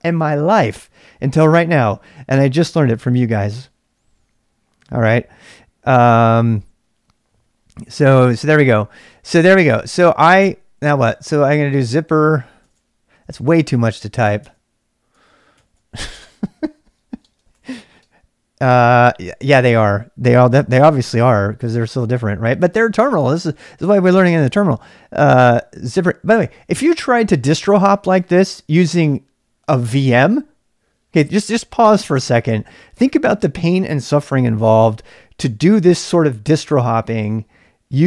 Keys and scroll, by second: 0.0-38.0 typing, 15.1 Tab.